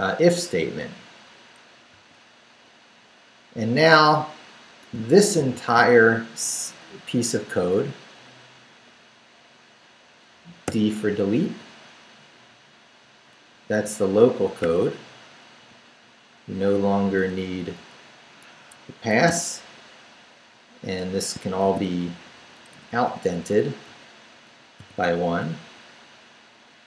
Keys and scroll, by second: 1.9 p, 2.9 Down, 4.9 shift+Down, 5.3 shift+v, 6.0 shift+Down, 10.6 d, 11.3 Down, 13.5 Down, 16.6 Down, 17.3 Down, 17.7 Up, 18.5 Escape, 19.1 d, 19.6 Up, 20.6 Up, 21.6 shift+v, 21.8 shift+Down, 23.5 Down, 24.4 shift+Down, 24.8 shift+,, 25.7 shift+Down.